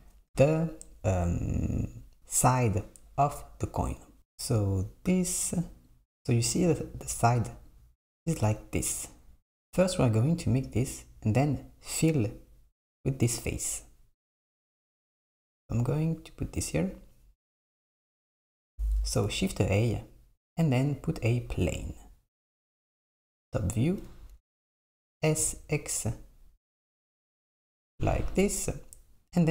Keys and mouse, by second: 18.6 click, 19.4 shift+a, 22.7 KP_7, 25.2 s.